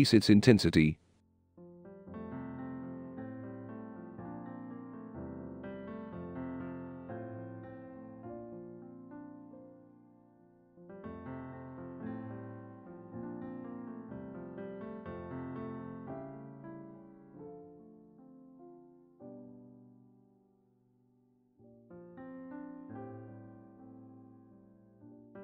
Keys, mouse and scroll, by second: 0.0 click, 3.2 s, 3.3 click, 7.0-8.8 typing, 10.5-11.0 drag, 12.2 click, 12.7 click, 14.1-15.2 drag, 15.9-16.8 drag, 17.6 click, 18.7-19.4 drag, 19.9 click, 20.6 drag, 21.5 click, 22.5 click, 25.2 click.